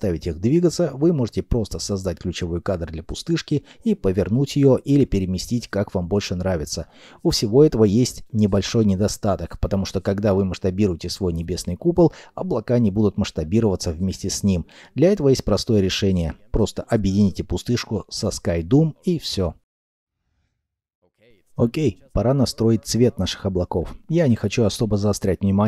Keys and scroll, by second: 6.4 alt+F9, 10.5 Escape, 14.8 ctrl+p, 19.6 Escape.